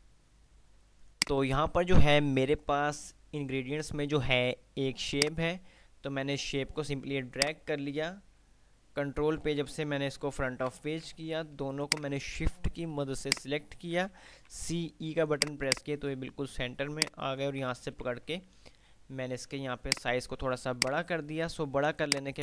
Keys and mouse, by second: 0.5 click, 5.3-6.7 drag, 7.3 F2, 7.3-8.2 click, 8.2 F2, 10.8 Page_Up, 11.7 Page_Up, 12.0 click, 13.5 shift+click, 15.3 click, 17.2-18.0 shift+click, 18.0 ctrl+r, 20.0 click, 20.3 F2, 22.3 click.